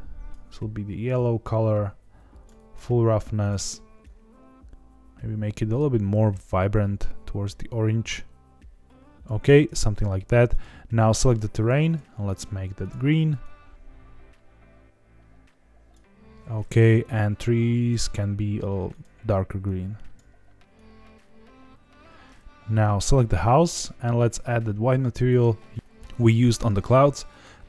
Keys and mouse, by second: 1.1-2.4 drag, 10.4 click, 12.0 click, 17.8 click, 18.8 click, 22.9 click, 24.1-25.3 drag.